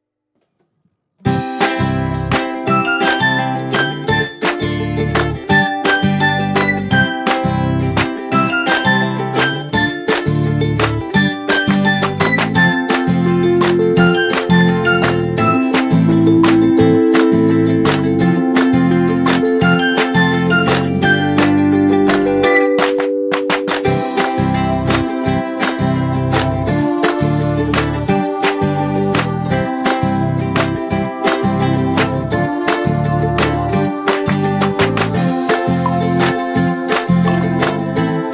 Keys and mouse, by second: 1.1 click, 3.2 shift+click, 7.8 click, 14.9 shift+click, 16.9 ctrl+g, 17.5 right click, 19.8 click, 21.5 ctrl+g, 22.5 click, 25.1 ctrl+z, 26.3 click, 26.9 m, 28.9 click, 36.9 click.